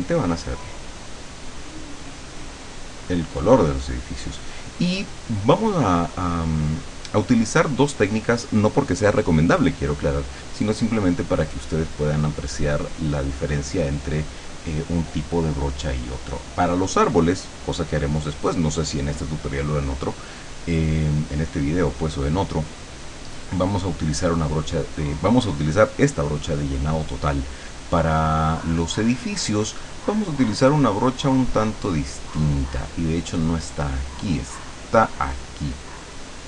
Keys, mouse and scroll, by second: 1.2 click, 1.8 click, 23.5 click, 29.0-31.1 drag, 32.2 click, 33.9 click, 35.9-36.4 drag.